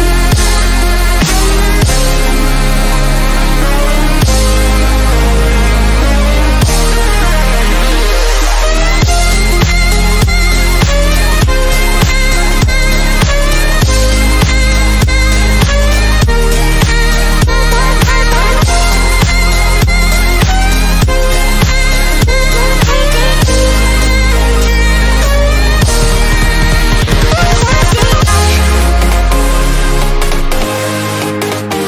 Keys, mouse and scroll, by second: 1.1-2.1 drag, 2.5-3.2 scroll down 1, 3.3 scroll down 1, 5.0 click, 7.6 shift+Num_Lock, 7.6 shift+click, 10.2 click, 11.2 shift+click, 12.0 shift+m, 15.7-16.5 scroll up 2, 17.2 click, 20.9 click, 21.4 shift+click, 22.8-24.9 drag, 25.4-26.2 scroll up 1, 26.3 click, 27.0 right click, 27.6 click, 29.9 click, 30.6 shift+click.